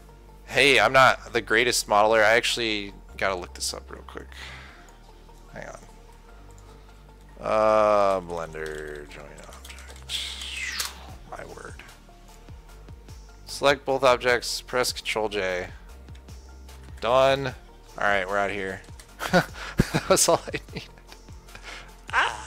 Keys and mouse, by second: 16.1-19.4 drag, 17.3 ctrl+j, 19.4 ctrl+s, 20.7 click.